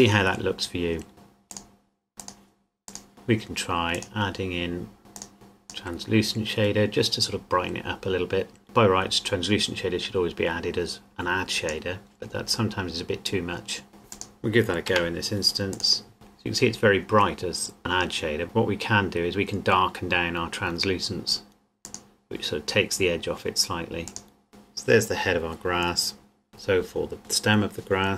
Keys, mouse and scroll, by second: 1.1 click, 2.2 click, 5.1 click, 8.6 click, 14.1 click, 14.9 Delete, 16.1 click, 17.8 click, 21.8 click, 26.2 scroll down 1, 26.5 click.